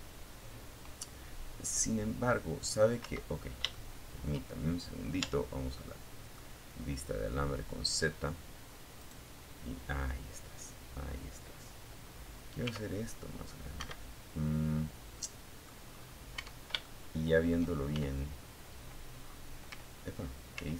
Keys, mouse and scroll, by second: 1.3 Escape, 1.9 shift+middle click, 3.4 z, 4.0 middle click, 7.2 right click, 10.8 s, 12.0 Escape, 13.4 middle click, 14.2 scroll up 2, 14.6 Tab, 15.0 shift+middle click, 16.2 shift+z, 17.4-17.7 scroll down 2, 18.8 ctrl+z, 19.6-20.0 ctrl+scroll down 2, 20.0-20.7 middle drag.